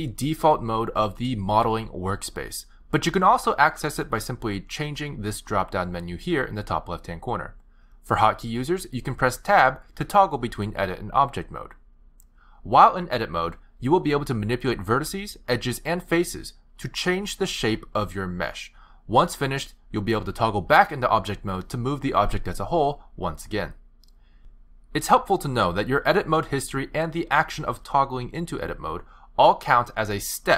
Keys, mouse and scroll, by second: 8.3 click, 9.1 click, 11.2 Tab, 12.0 Tab, 12.8 Tab, 13.1 click, 15.2 click, 15.9 shift+click, 16.6 shift+click, 17.2 shift+click, 18.3 g, 23.0 click, 24.1 g, 28.7 ctrl+z, 29.6 ctrl+z.